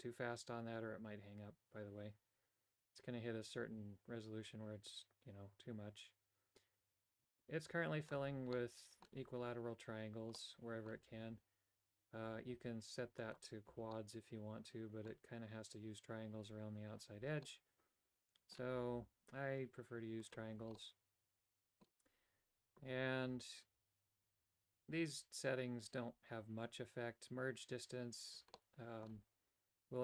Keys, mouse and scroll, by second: 8.5 middle click, 10.4 middle click, 13.2 click, 13.9 middle click, 17.4-18.5 middle drag, 20.2 click, 20.7-21.8 middle drag, 28.5 middle click.